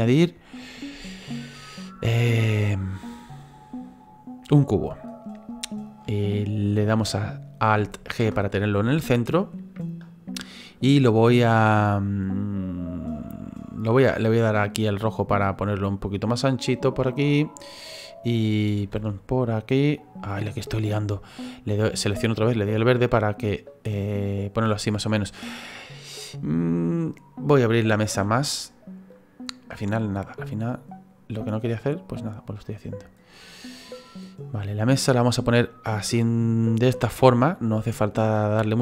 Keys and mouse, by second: 5.0 click, 10.5 click, 14.2 click, 16.8 middle click, 18.0 click, 19.4 click, 21.0 right click, 22.5 click, 25.2 middle click, 29.1 click, 30.1 click, 33.8 middle click, 35.3 click.